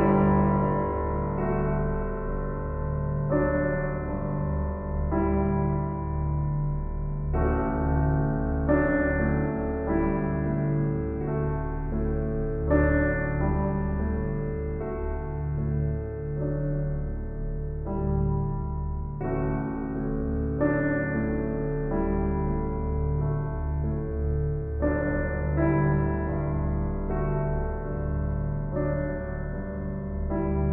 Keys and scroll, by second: 0.4 shift+s, 2.6 shift+s, 13.8 shift+s, 15.6 s, 16.9 s, 19.2 shift+s, 26.6 ctrl+z, 27.0 ctrl+z, 27.4 ctrl+z, 27.8 ctrl+z, 28.0 ctrl+z, 28.3 ctrl+z, 28.6 ctrl+z.